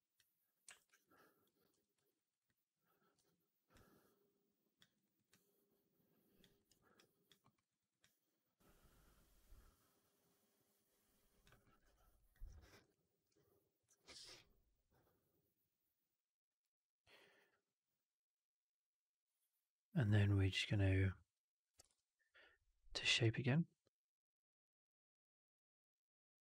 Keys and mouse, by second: 0.5 w, 0.8 alt+right click, 1.0 alt+click, 1.9 4, 2.0 alt+right click, 2.2 alt+right drag, 2.3-3.0 alt+drag, 3.0 alt+q, 3.6-4.7 alt+drag, 4.8 alt+right drag, 5.0 alt+right drag, 5.2-6.3 alt+drag, 6.5 alt+right drag, 6.6 alt+right drag, 6.8-7.2 alt+drag, 7.3 alt+middle drag, 7.5 alt+right drag, 7.7 alt+right drag, 7.9-11.3 alt+drag, 11.5 alt+middle drag, 11.7 alt+right drag, 12.0 alt+click, 13.9 alt+right drag, 14.1 alt+right drag, 14.2-20.5 alt+drag, 21.8 shift+Tab.